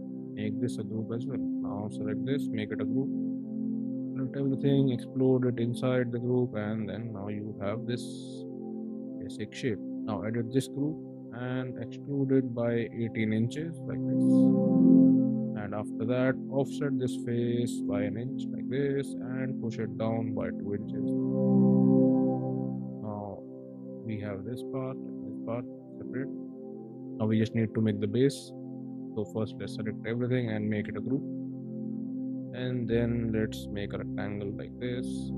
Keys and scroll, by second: 0.2 ctrl+g, 2.6 ctrl+g, 3.9 ctrl+a, 4.6 shift+x, 10.9 p, 12.4 1, 12.9 8, 13.3 Return, 13.7 space, 16.1 f, 17.6 1, 18.1 Return, 18.5 space, 19.0 p, 20.1 2, 20.6 Return, 20.9 space, 30.9 ctrl+g, 32.0 r, 35.0 space.